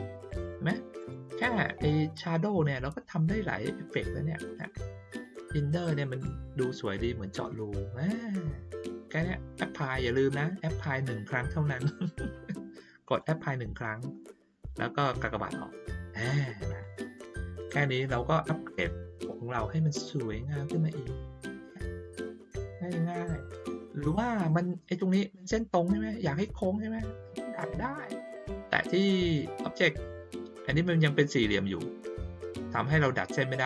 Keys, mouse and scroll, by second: 0.9 click, 4.4 click, 13.0 click, 15.1 click, 16.6 click, 18.1-19.0 ctrl+scroll down 1, 19.0 ctrl+scroll down 1, 19.6 ctrl+scroll up 1, 19.7 ctrl+scroll down 1, 20.4-21.0 ctrl+scroll down 1, 21.0 ctrl+scroll up 1, 21.1 ctrl+scroll down 1, 22.5-23.2 ctrl+scroll down 1, 27.5 click, 28.1 click.